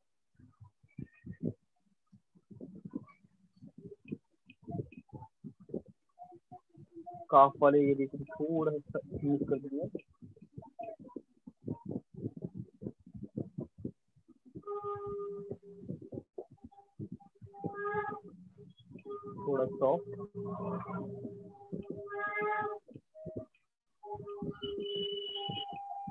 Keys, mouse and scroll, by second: 1.5 alt+click, 3.9 click, 4.9 alt+click, 7.0 click, 9.8 click, 11.9 alt+click, 13.9 click, 14.9 click, 15.9 click, 16.9 alt+click, 17.9 alt+click, 18.9 click, 20.0 click, 20.9 alt+click, 25.8 click.